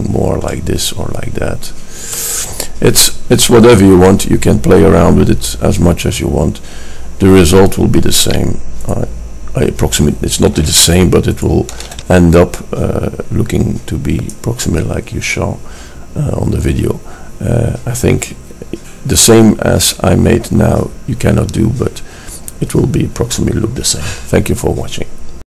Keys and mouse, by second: 10.5 middle click, 14.1-25.5 middle drag.